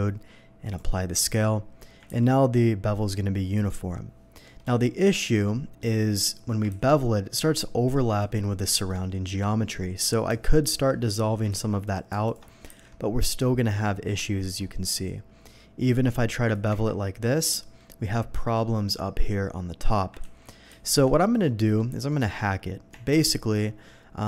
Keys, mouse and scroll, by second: 0.6 click, 1.2 Tab, 2.1 ctrl+b, 4.6 Escape, 5.0 middle drag, 5.4 shift+middle click, 6.7 ctrl+b, 8.2 Escape, 8.7 middle click, 10.6 alt+click, 11.5 ctrl+x, 11.8 click, 12.2 ctrl+alt+x, 12.2 alt+click, 12.7 ctrl+b, 14.3 middle click, 14.8 middle click, 16.5 click, 17.0 Tab, 17.0 middle drag, 17.6 middle click, 20.2 ctrl+z, 20.7 ctrl+z, 21.1 scroll up 1, 21.5 middle click, 22.1 middle click, 23.3 Tab, 23.3 middle click.